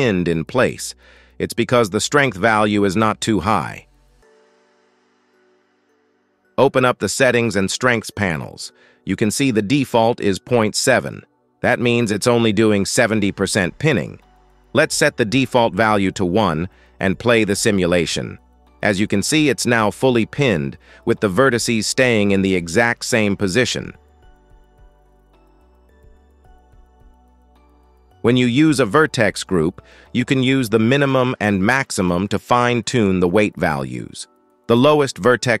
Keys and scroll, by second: 1.1 space, 5.3 space, 6.1 shift+Left, 17.0 space, 23.8 space, 24.3 shift+Left, 24.5 space, 27.3 space.